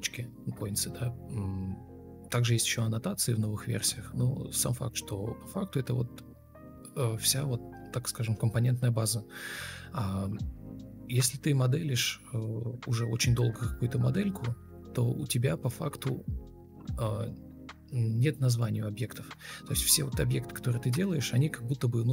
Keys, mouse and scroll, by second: 1.9 ctrl+click, 4.0 ctrl+space, 4.1 ctrl+space, 7.7 a, 8.1 Escape, 8.5 Escape, 11.9 Right, 13.1 Right, 14.6 Left, 15.5 Right, 16.6 Delete, 17.1 ctrl+space, 17.9 ctrl+super+c, 18.1 ctrl+v, 21.3 shift+click, 21.7 shift+double click.